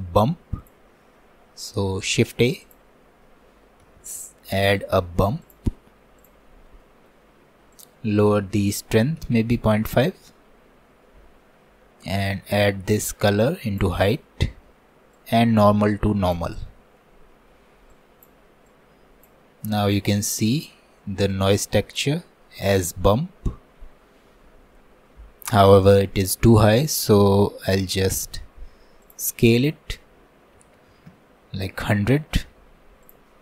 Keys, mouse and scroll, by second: 1.8 shift+a, 6.8 middle click, 7.8-16.7 drag, 16.7 middle click, 17.3-18.0 scroll down 1, 18.0-22.3 drag, 22.3-23.7 middle drag, 23.7-24.1 scroll up 1, 24.1-25.2 scroll down 1, 25.2-26.5 scroll down 1, 26.5 scroll down 1, 26.8-28.5 shift+middle drag, 28.5-29.0 scroll up 2, 29.1-30.9 drag, 30.9 KP_0, 33.1-33.4 drag.